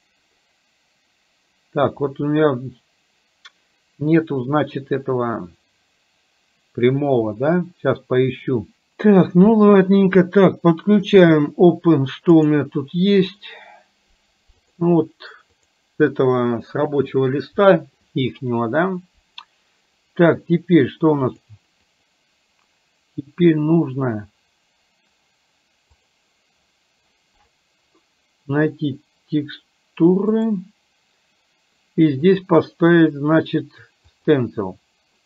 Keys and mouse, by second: 11.1 click, 21.4 click, 30.4 click, 32.5-34.4 drag.